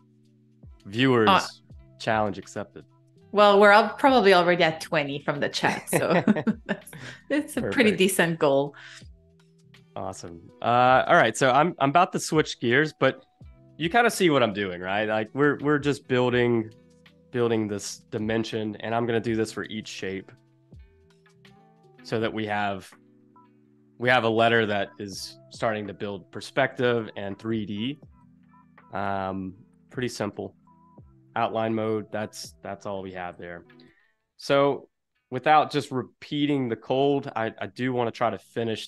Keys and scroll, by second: 0.3 super+=, 0.4 space, 2.2 space, 4.6 space, 5.3 Escape, 6.3 super+-, 6.9 space, 9.5 space, 19.6 v, 24.6 space, 28.0 space, 30.1 super+z, 31.3 super+y, 33.1 super+y, 34.4 super+z, 35.4 Escape, 37.1 space.